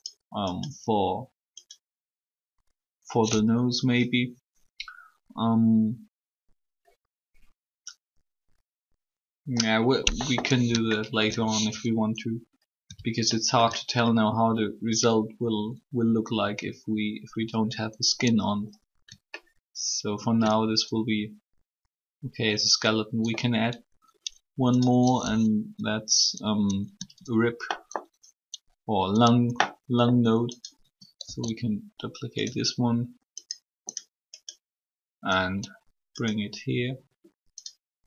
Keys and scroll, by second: 31.0 shift+d.